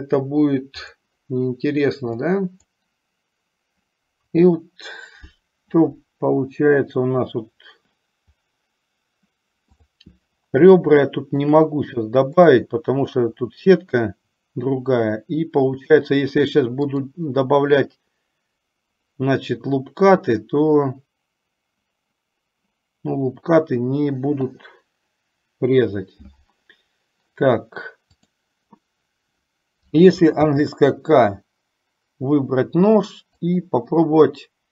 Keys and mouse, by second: 2.4 click, 10.0 click, 11.3 shift+middle click, 17.3 click, 28.4 click, 30.5 k.